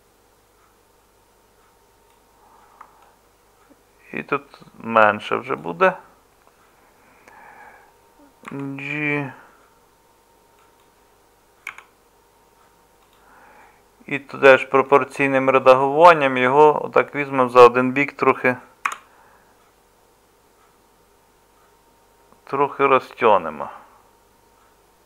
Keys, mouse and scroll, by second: 8.5 g, 11.7 s, 18.9 g.